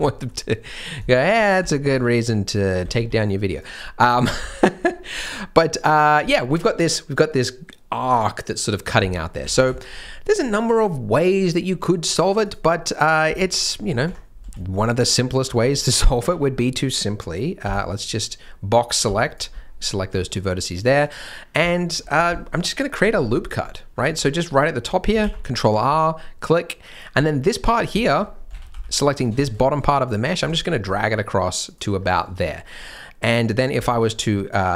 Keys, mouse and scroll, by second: 0.0 shift+middle click, 0.6-1.2 scroll down 2, 1.0 shift+scroll, 1.3 shift+scroll up 1, 1.6 alt+a, 1.9 b, 2.8 g, 3.8 scroll down 1, 4.3 scroll up 1, 4.8 scroll down 1, 5.0-5.8 scroll up 1, 9.2 scroll up 1, 9.5 alt+a, 9.7 shift+m, 12.4 click, 13.2 g, 14.4 v, 15.6 g, 17.6 b, 18.4 scroll down 1, 19.0 b, 19.5 scroll up 1, 20.0 g, 21.6-21.9 shift+scroll up 2, 21.7 shift+middle click, 22.1 scroll down 1, 22.3 shift+middle click, 22.3 shift+scroll, 22.5 shift+scroll up 2, 22.5 shift+scroll, 23.1 scroll down 1, 23.6-23.9 scroll up 1, 23.9-24.7 scroll down 1, 24.7 scroll up 1, 25.1 ctrl+r, 27.1 scroll up 1, 27.9 shift+m, 28.3 scroll down 1, 28.5 alt+a, 28.6 b, 29.3 scroll up 1, 29.6 shift+m, 30.3 g, 31.9-32.3 scroll down 1, 32.7-33.4 scroll up 1, 33.7 e.